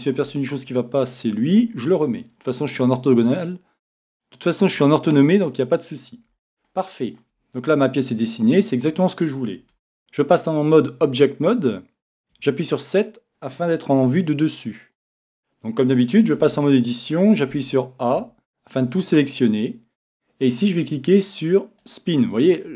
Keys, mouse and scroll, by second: 1.0-2.8 drag, 4.1-6.0 drag, 6.0-10.0 middle drag, 6.0-6.4 scroll up 1, 9.1-9.8 scroll up 1, 9.7 Tab, 14.2-16.1 middle drag, 16.4 Tab, 17.6 a, 21.8 click.